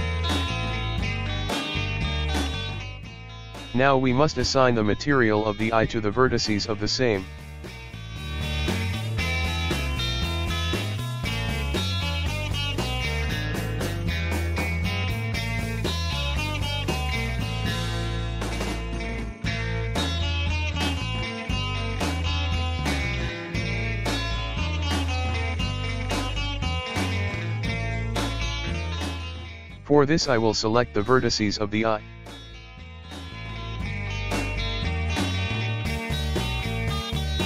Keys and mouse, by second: 0.0-3.5 drag, 5.5-9.8 shift+middle drag, 9.8 Tab, 12.0 a, 14.0-21.6 ctrl+middle drag, 21.6-23.1 drag, 23.1-25.6 shift+middle drag, 25.6-26.9 a, 30.0 a, 32.6 a, 32.9 a, 34.0 l, 36.6 l.